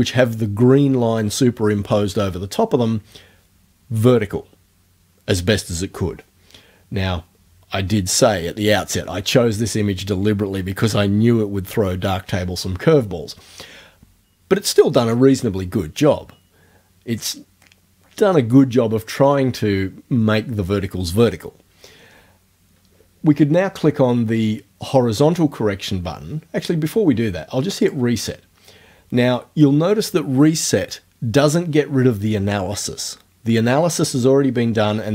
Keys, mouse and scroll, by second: 27.9 click.